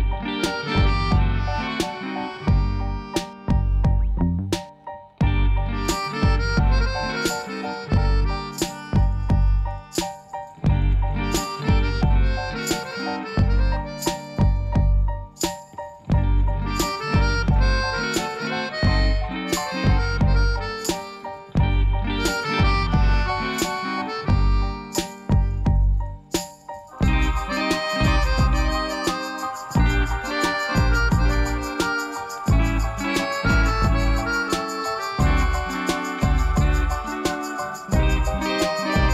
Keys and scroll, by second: 5.0 Tab, 7.0 shift+d, 7.3 z, 8.8 p, 10.3 Tab, 12.5 e, 14.8 e, 19.7 g, 22.6 2, 24.9 ctrl+b, 30.2 3, 39.0 s.